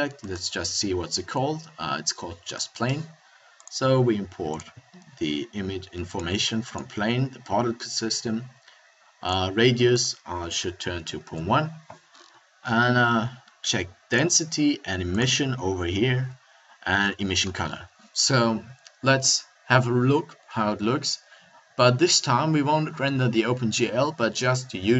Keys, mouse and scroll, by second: 3.6-5.4 drag.